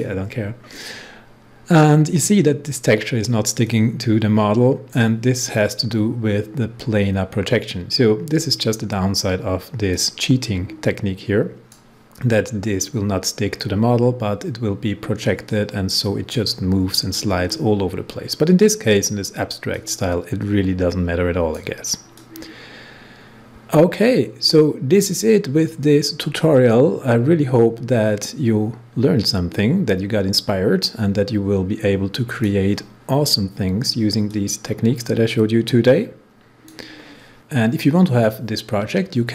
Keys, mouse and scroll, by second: 3.8-7.6 drag, 9.9-14.1 drag, 15.6-18.8 drag, 19.7-32.1 drag, 34.2-37.3 drag.